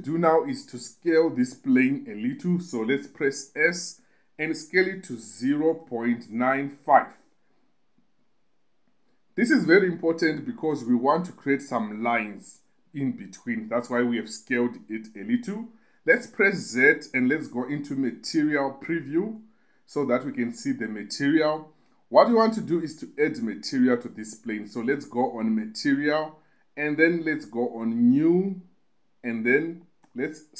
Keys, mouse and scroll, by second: 4.0 s, 5.7 0, 6.2 ., 6.7 9, 7.2 5, 7.9 click, 9.3 typing, 17.0 z, 25.9 click, 28.1 click, 29.8-30.5 drag.